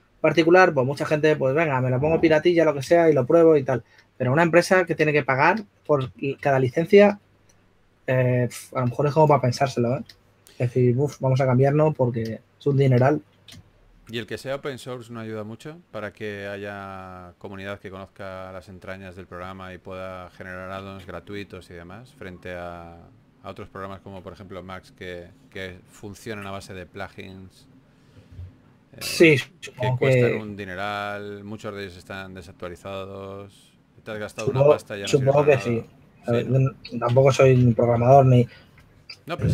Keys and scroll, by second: 7.4 s, 10.1 s, 15.0 s, 18.6 typing, 20.2 typing, 27.1 typing, 28.6 typing, 30.7-32.4 typing, 33.5 typing, 36.9 4, 38.5 s.